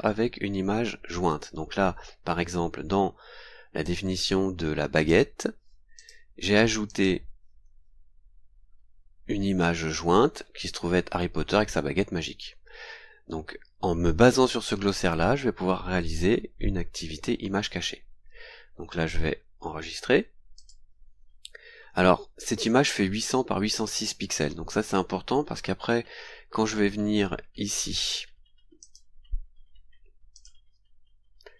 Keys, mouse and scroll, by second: 3.8-5.3 drag, 6.0 click, 6.9 click, 8.5-9.2 scroll down 2, 9.8 scroll down 2, 17.1-18.8 scroll up 8, 18.9-20.2 scroll down 8, 20.5 click, 28.8 click, 30.3 click.